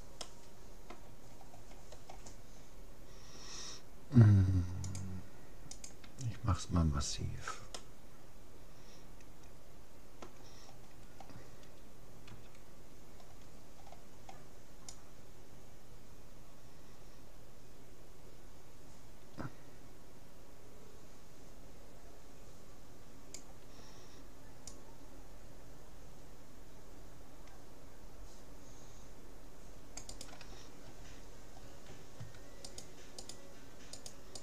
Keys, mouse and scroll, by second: 0.2-2.0 middle drag, 2.0-2.4 scroll up 1, 2.4-4.0 middle drag, 4.8-6.6 drag, 7.2-7.8 scroll down 1, 7.8-9.4 middle drag, 10.7-13.2 middle drag, 12.4 c, 31.2-32.8 middle drag, 32.8-34.4 right drag.